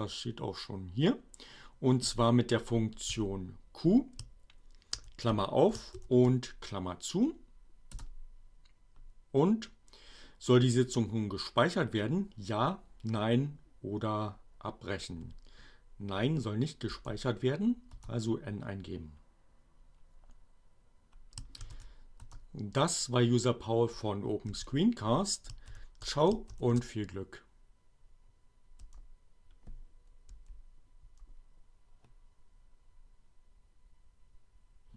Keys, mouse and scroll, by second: 2.5 q, 5.0 shift+8, 5.3 shift+9, 7.6 Return, 15.6 n, 18.3 Return, 20.7 shift+r, 21.9 shift+Return, 23.3 q, 25.7 shift+8, 26.5 shift+9, 28.3 Return, 29.6 n, 31.1 Return.